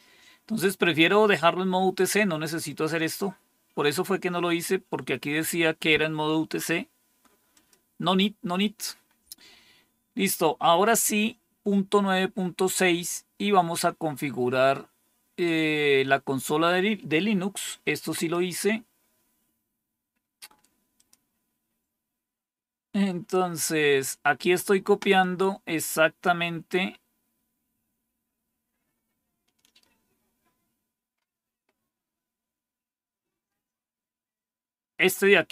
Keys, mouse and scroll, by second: 0.0-1.4 scroll down 1, 1.4-1.9 scroll down 1, 1.9-3.8 scroll down 1, 3.8-4.4 scroll down 1, 4.4-7.4 scroll down 1, 7.4 click, 19.7-20.5 scroll down 2, 20.5-20.8 scroll down 1, 20.8 click, 21.4-25.7 scroll down 2, 25.7-31.0 scroll down 1, 31.0-35.5 scroll down 1.